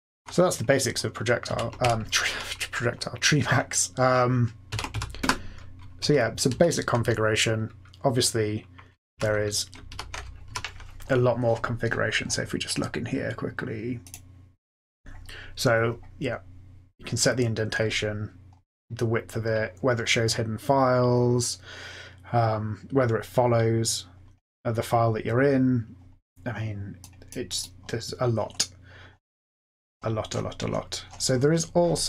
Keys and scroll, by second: 1.4 ctrl+x, 1.7 o, 4.6 ctrl+x, 4.9 k, 5.1 Return, 6.4 Down, 9.1 super+f, 9.9 super+Left, 10.5 super+f.